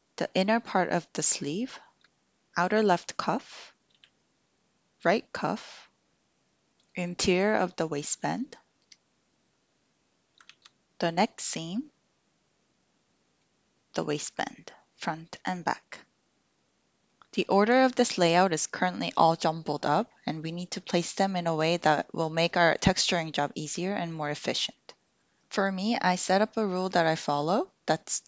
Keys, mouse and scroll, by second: 3.9 l, 10.5 alt+z, 11.2-13.4 middle drag, 14.7-17.1 middle drag.